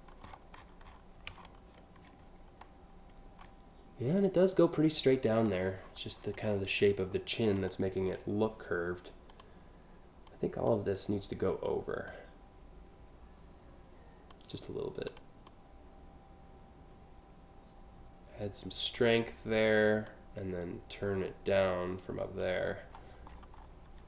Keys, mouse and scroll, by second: 1.7 click, 2.3 scroll up 1, 2.6 scroll down 1, 5.0-5.6 scroll down 2, 5.8-6.3 alt+scroll up 2, 7.2 click, 8.9 click, 9.9-10.3 drag, 11.7-13.9 drag, 14.7 click, 15.1-18.6 drag, 19.7-22.0 drag, 22.6-23.1 scroll up 4.